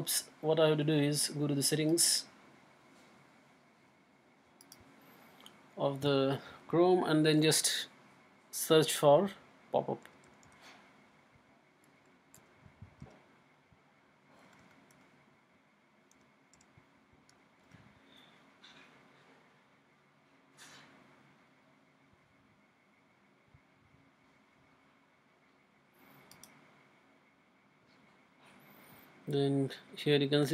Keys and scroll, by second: 9.8-10.9 typing, 12.4 u, 13.0 p, 14.4 BackSpace, 14.6 BackSpace, 14.9 BackSpace, 16.1 u, 16.5 p, 17.3 BackSpace, 17.6 BackSpace.